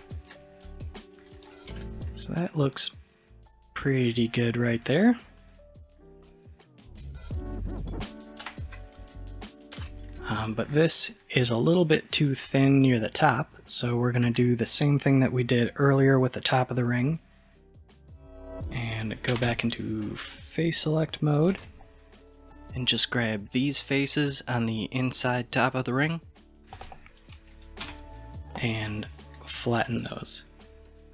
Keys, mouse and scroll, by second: 0.4-1.7 middle drag, 1.7 alt+z, 2.1-5.1 middle drag, 8.4 KP_1, 9.8 alt+z, 17.2-19.3 middle drag, 19.3 3, 20.0 middle click, 20.6 click, 21.5 alt+z, 22.3 click, 22.9 shift+click, 23.5 shift+click, 24.1 shift+click, 24.6-27.9 middle drag, 27.9 n, 30.0-30.9 drag, 30.9-31.1 middle drag.